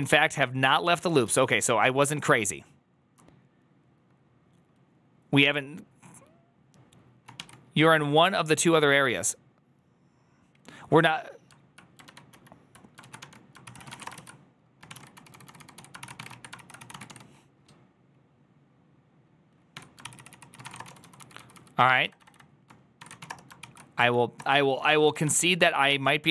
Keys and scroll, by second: 0.2 ctrl+u, 0.8 ctrl+u, 1.9 ctrl+u, 1.9-2.9 typing, 7.4 shift+a, 12.3 alt++, 12.3 alt+{, 12.9 ctrl+a, 13.1-17.4 typing, 19.6 Tab, 19.8-26.3 typing, 25.5 Up, 25.7 Return.